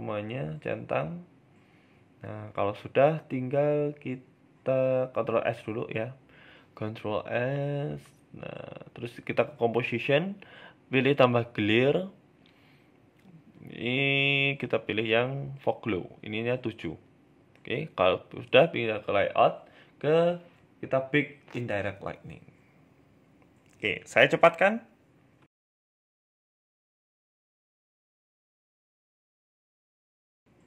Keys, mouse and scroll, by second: 0.2 click, 1.1 KP_0, 1.7-3.1 scroll up 10, 16.7 click, 17.3-18.6 scroll down 7, 17.7-18.6 scroll up 2, 18.6 scroll up 1, 19.0 click, 19.7 click.